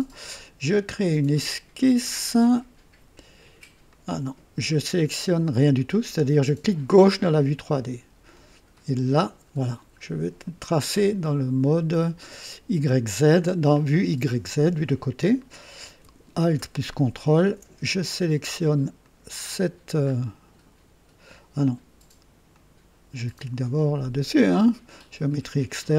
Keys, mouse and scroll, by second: 1.7 click, 3.8 click, 6.8 click, 8.6 click, 10.3 click, 13.3 click, 16.7-17.4 ctrl+alt+drag, 18.9 click, 20.0-20.3 scroll up 2, 22.4 click.